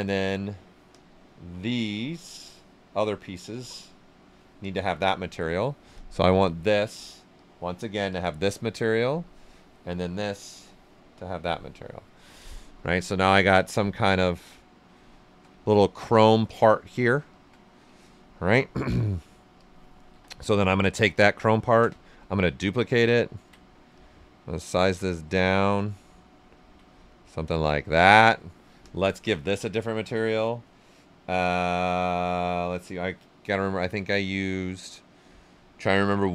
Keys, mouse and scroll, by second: 0.9 click, 0.9 typing, 3.5 click, 4.6-5.9 drag, 13.6 ctrl+right click, 14.4 ctrl+right click, 15.6-17.9 ctrl+right drag, 17.9-19.5 alt+right drag, 19.5 click, 20.1 w, 20.6 alt+right click, 21.1 ctrl+right click, 22.1-23.9 ctrl+drag, 23.9-26.0 drag, 26.0 ctrl+right click, 27.1-28.8 drag, 28.8 click, 30.4 typing.